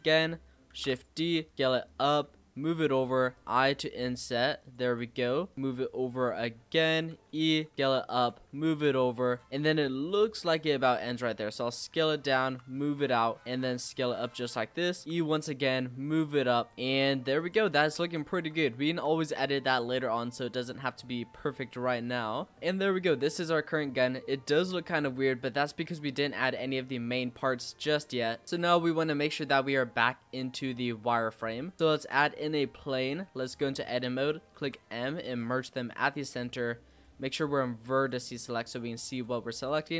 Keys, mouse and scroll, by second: 0.7 shift+d, 1.1 s, 2.1 e, 4.8 e, 7.1 e, 7.7 s, 8.3 e, 9.5 middle click, 9.5-10.4 scroll up 1, 10.4-10.7 scroll up 1, 10.7 i, 12.4 e, 13.4 s, 14.5-14.8 scroll up 2, 14.8 shift+middle click, 15.0 e, 15.4 s, 16.7 e, 17.7-18.6 scroll down 10, 18.0 Tab, 18.6 shift+scroll up 1, 18.6-19.0 shift+middle drag, 19.0-19.6 shift+scroll down 4, 19.6 click, 19.9 scroll up 1, 19.9-20.4 middle drag, 20.4-21.3 scroll up 4, 21.3-21.8 middle drag, 21.8 z, 22.5 scroll down 1, 22.5-23.2 middle drag, 23.2 scroll down 2, 23.4-25.4 middle drag, 25.4 click, 25.8-26.8 scroll up 7, 26.8-28.4 shift+middle drag, 28.4 z, 30.0-30.7 scroll down 6, 30.7-31.4 middle drag, 31.4 click, 31.7 shift+a, 32.3-32.7 scroll down 5, 32.9-33.4 middle drag, 33.4 Tab, 34.5 m, 36.8 click, 37.9-39.1 drag, 39.5 a, 39.8-39.9 scroll up 7.